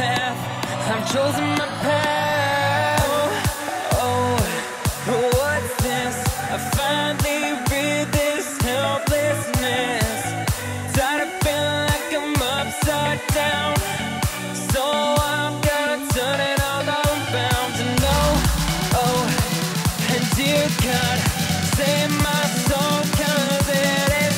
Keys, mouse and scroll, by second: 0.4-2.1 middle drag, 2.1 shift+d, 4.5 click, 6.3 click, 8.8 KP_1, 10.1 click, 12.7 ctrl+j, 13.3 click, 14.3 click, 14.9 shift+click, 16.3 ctrl+j, 16.8 click, 17.5 click, 18.1 shift+click, 19.1 ctrl+j, 19.5 click, 19.9 scroll down 2, 20.5-21.6 middle drag, 21.6 space.